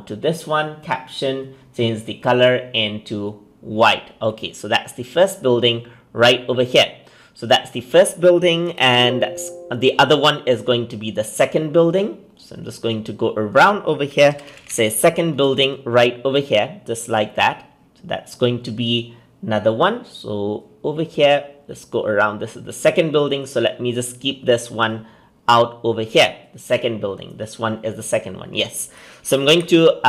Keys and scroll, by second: 8.5 ctrl+c, 8.7 ctrl+v, 29.3 ctrl+c, 29.4 ctrl+v.